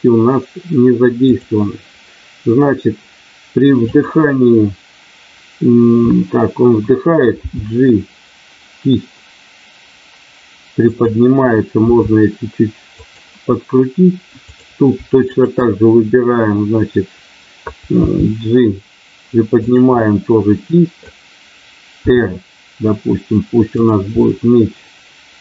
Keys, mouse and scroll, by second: 1.2 click, 3.9 click, 7.4 g, 10.9 click, 11.8 r, 12.9 click, 15.3 shift+click, 18.0 g, 19.7 click, 20.8 middle click, 22.0 r, 23.8 click, 24.2-25.4 middle drag.